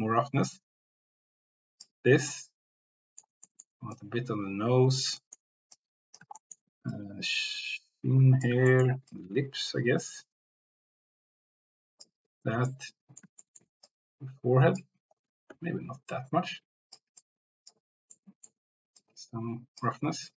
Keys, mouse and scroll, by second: 2.4 middle click, 3.5 middle click, 4.0 click, 5.4 middle click, 5.8 click, 7.1-8.5 drag, 8.6 shift+middle click, 9.2-12.0 drag, 12.8 middle click, 13.6 middle click, 14.0 click, 15.5 ctrl+z, 16.1 click, 17.2 click, 18.1 middle click, 19.1 click.